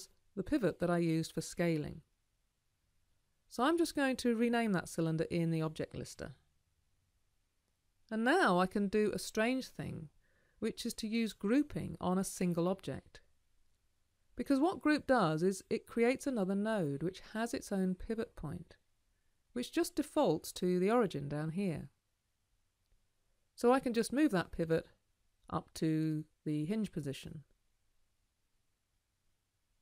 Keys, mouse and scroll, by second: 29.0-29.8 alt+drag.